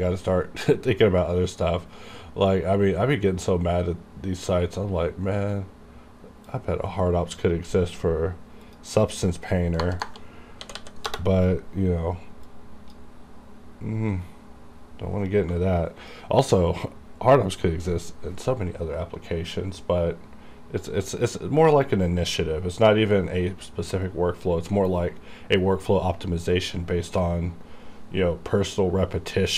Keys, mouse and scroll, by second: 6.6-8.7 drag, 8.7 click, 9.0 click, 10.7-11.1 typing, 11.1 Return, 12.5-29.5 drag.